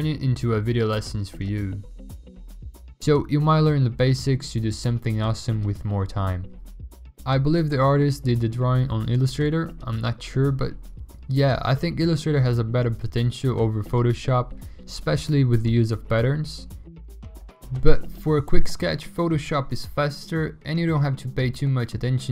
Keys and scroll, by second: 4.5 v, 9.4-12.2 typing, 13.8 ctrl+a, 13.8 Delete, 13.8 ctrl+d, 19.4 alt+BackSpace, 19.5 ctrl+d, 19.6 ctrl+w.